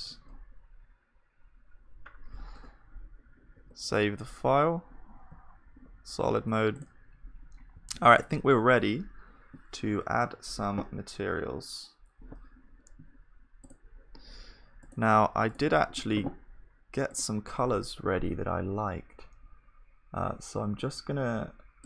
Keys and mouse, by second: 0.3-2.4 middle drag, 2.6 Tab, 3.6 ctrl+s, 3.9 Tab, 5.3 z, 6.9-8.9 drag, 6.9-12.2 middle drag, 21.8 middle click.